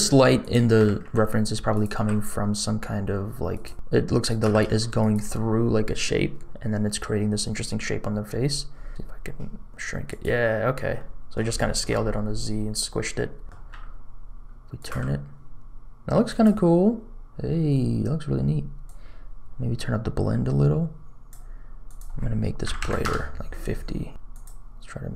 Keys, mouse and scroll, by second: 0.7 r, 1.9 g, 4.4 g, 8.3-8.9 scroll up 3, 8.9 s, 10.9 middle click, 11.5 shift+middle click, 11.9-12.7 scroll down 3, 12.9 scroll up 3, 13.4 middle click, 13.6 r, 15.5 g, 18.8-21.2 drag, 22.5 click, 24.2 click.